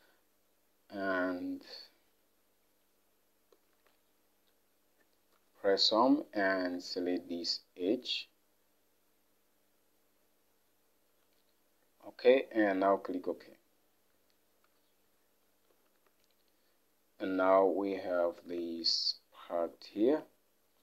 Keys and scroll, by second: 5.5 Home, 10.6 Home, 14.7 Home, 15.9 alt+Tab.